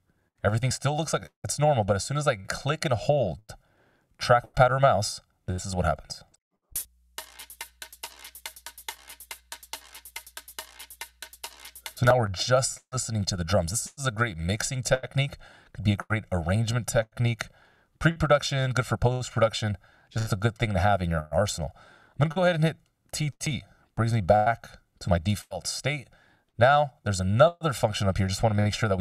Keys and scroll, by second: 14.4 s, 23.4 t.